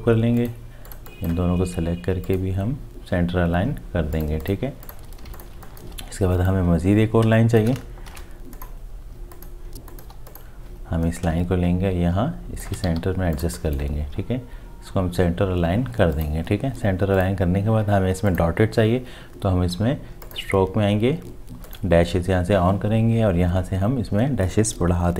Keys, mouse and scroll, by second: 5.2 space, 7.2 alt+click, 7.4 shift+click, 8.1 alt+shift+click, 8.2 ctrl+shift+g, 10.1 Delete, 11.4 shift+click, 13.0 v.